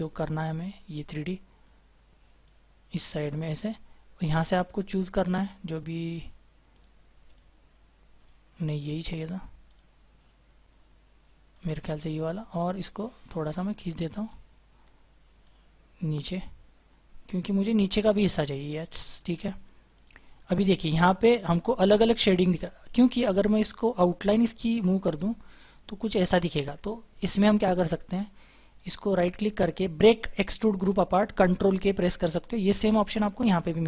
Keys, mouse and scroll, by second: 17.3-18.3 scroll down 1, 18.3-18.7 scroll up 1, 18.7-20.4 scroll down 1, 20.4 double click, 21.9-22.4 scroll down 1, 22.4-24.5 scroll up 1, 25.0 right click, 26.5 ctrl+z, 28.7 right click.